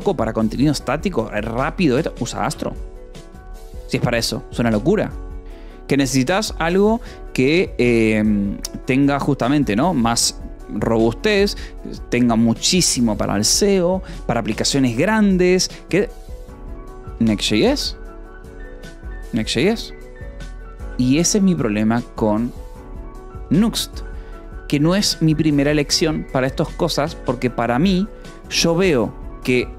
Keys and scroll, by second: 2.9 Escape, 3.8 shift+v, 4.5 Escape, 7.8 ctrl+d, 9.3 ctrl+d, 9.5 j, 10.9 k, 14.0 ctrl+d, 14.2 k, 14.9 j, 15.2 k, 17.8 k, 19.9 Escape, 20.8 ctrl+v, 21.0 Escape, 21.8 ctrl+d, 22.8 ctrl+d, 24.3 j.